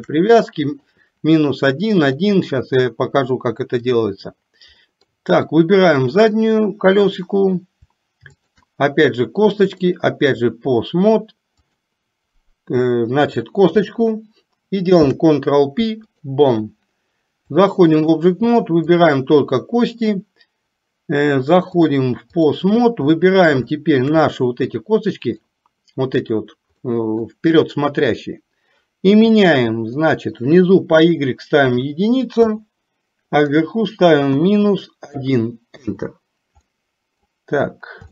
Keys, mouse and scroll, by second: 0.4 middle click, 2.0-4.1 drag, 4.9 middle click, 8.5 shift+click, 9.9-10.6 drag, 11.7 click, 17.6-18.4 drag, 19.0 click, 21.7 click, 23.1 middle click, 23.7 shift+middle click, 26.9 middle click, 30.1-32.6 drag, 33.5-36.0 drag, 36.7 middle click.